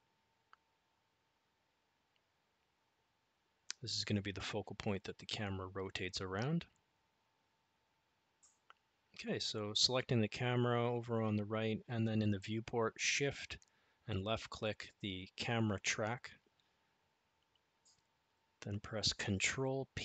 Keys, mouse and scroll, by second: 5.4 click, 12.5 shift+click, 15.8 ctrl+p.